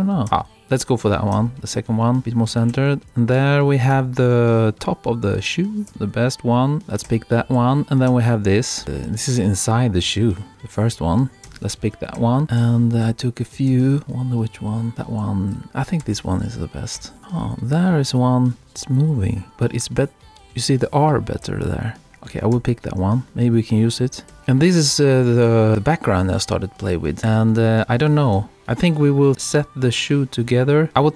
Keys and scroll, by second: 2.2 Right, 2.7 Right, 6.8 Right, 12.2 Right, 15.2 Left, 17.0 Right, 18.5 Left, 20.4 Left, 24.3 Right, 27.2 Right.